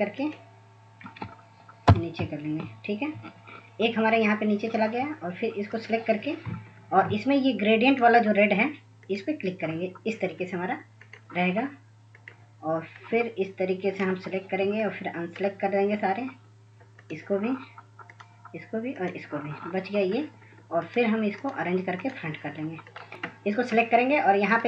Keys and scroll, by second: 2.0 ctrl+[, 2.3 ctrl+[.